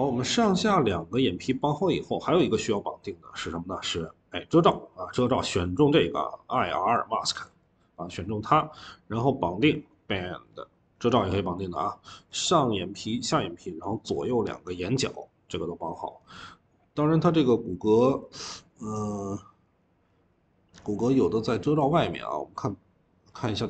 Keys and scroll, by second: 16.1 Escape.